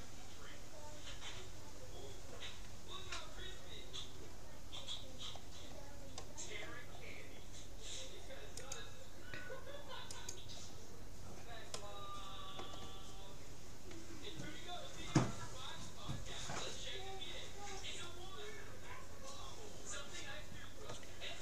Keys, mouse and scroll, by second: 4.7-8.7 middle drag, 8.7-9.9 drag, 11.8-13.5 middle drag.